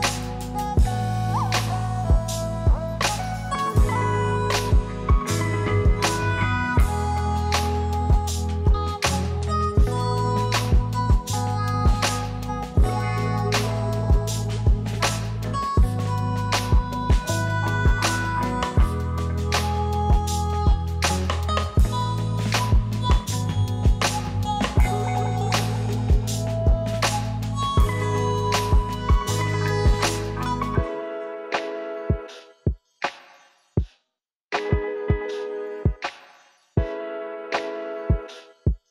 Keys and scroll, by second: 2.4 0, 10.0 ctrl+d, 13.2 u, 17.7 0, 23.3 ctrl+s.